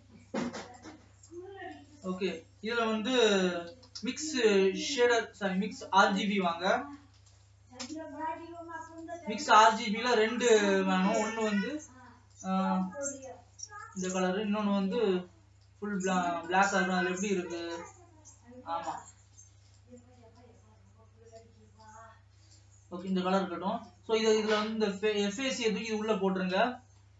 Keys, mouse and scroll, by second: 7.2 shift+a, 10.1 scroll up 5, 19.2 scroll up 5, 24.0-27.1 drag.